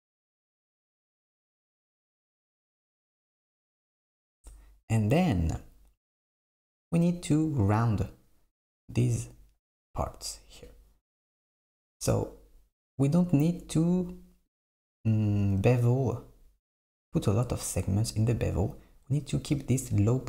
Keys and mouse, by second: 0.8 click, 2.2 s, 13.8 click, 14.5 click, 15.1 Tab.